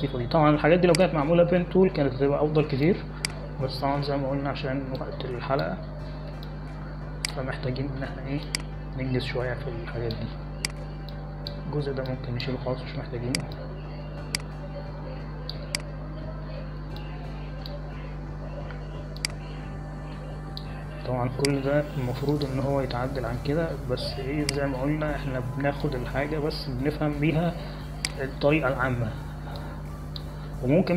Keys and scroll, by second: 0.6 space, 8.4 space, 19.0 space.